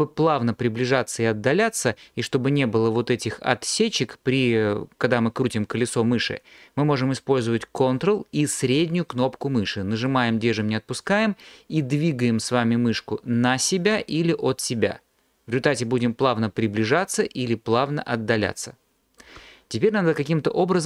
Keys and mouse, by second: 10.1 ctrl+click.